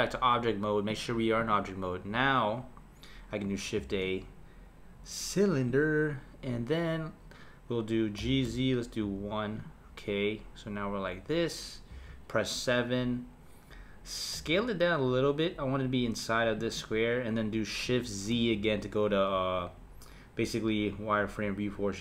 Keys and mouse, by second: 0.9-3.8 drag, 3.8 shift+a, 8.2 g, 11.9 KP_7, 14.3 s, 18.3 shift+z.